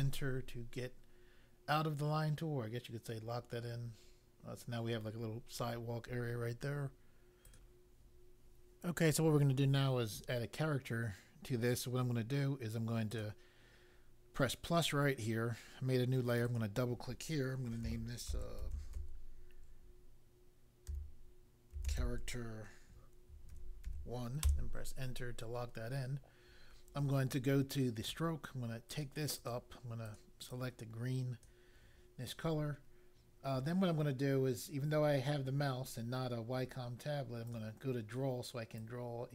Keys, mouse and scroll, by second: 7.5 click, 13.1 click, 16.2 click, 16.5 click, 17.5-19.2 typing, 20.8-24.4 typing, 24.4 Return, 27.7 click, 28.9 click, 29.3 click, 29.5 double click, 30.1 click, 30.4 click, 37.5 click, 38.7 click.